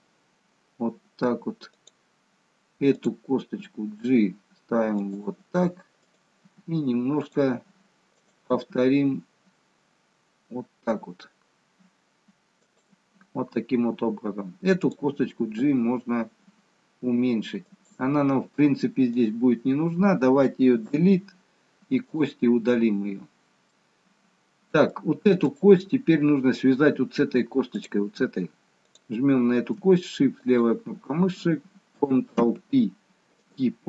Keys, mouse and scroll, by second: 2.8 click, 3.4 g, 6.0 click, 6.5 g, 8.3 click, 8.5 g, 14.9 click, 15.5 g, 19.1 click, 20.9 Delete, 23.8 middle click, 25.5 click, 27.8 click, 30.5 click, 31.1 shift+click, 32.3 ctrl+p.